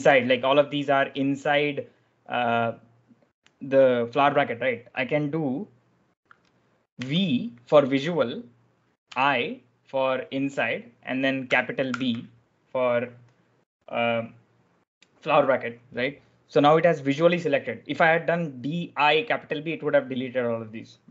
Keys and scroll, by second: 6.9 v, 8.9 i, 11.8 shift+b.